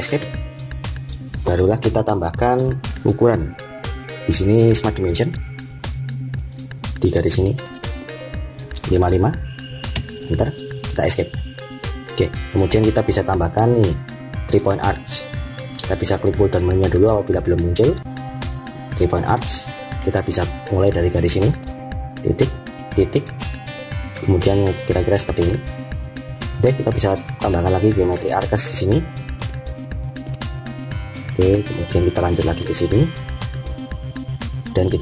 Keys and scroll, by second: 9.8 Return, 11.0 Escape.